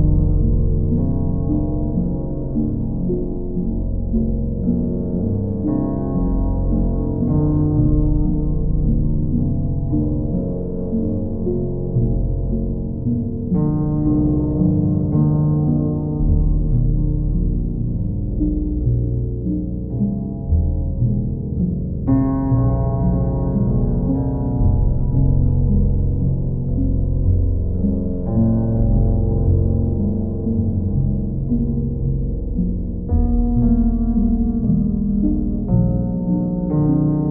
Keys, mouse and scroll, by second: 0.0 click, 0.7 click, 1.1 shift+click, 1.9 shift+click, 2.6 alt+click, 3.4 alt+click, 3.6 shift+click, 4.5 alt+click, 6.5 alt+click, 6.9 click, 7.3 alt+click, 9.7 q, 13.1 click, 13.3 ctrl+z, 14.2 click, 14.8 click, 15.4 shift+click, 16.1 shift+click, 16.6-17.7 right drag, 17.8-18.9 drag, 22.7-23.7 drag, 26.0 click, 26.2 ctrl+z, 31.1 shift+click, 32.5-33.6 right drag, 35.7-36.8 drag.